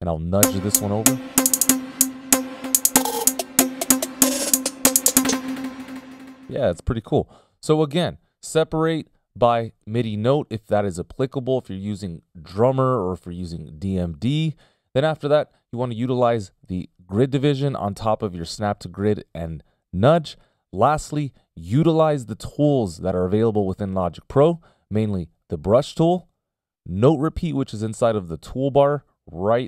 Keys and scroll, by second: 0.0 F18, 0.1 /, 0.8 alt+Right, 6.9 space, 8.0 p.